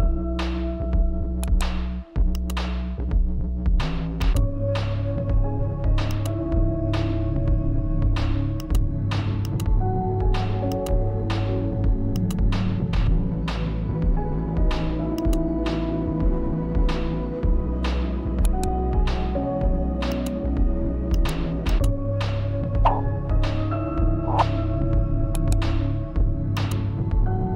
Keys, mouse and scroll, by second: 1.1 right click, 2.0-3.9 shift+drag, 5.6-14.2 drag, 15.1-16.9 drag, 16.9 ctrl+z, 18.0 right click, 19.6-24.9 drag, 24.9 right click, 26.0-27.5 drag.